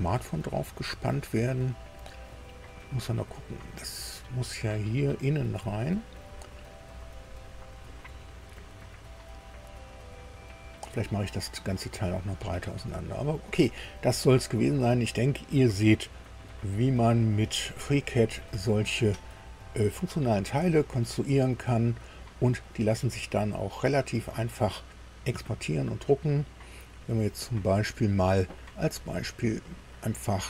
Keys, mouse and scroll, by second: 0.0 scroll up 2, 0.1-1.6 middle drag, 3.8 click, 4.0 scroll down 2, 4.4 click, 5.6 shift+click, 7.6 middle click, 12.4 scroll down 2, 13.1-16.3 drag, 16.8 scroll up 2, 17.6 middle click, 18.6 shift+middle click, 19.6 shift+scroll down 3, 20.3-22.2 middle drag, 27.2-27.6 scroll up 2, 29.0-29.4 scroll up 2.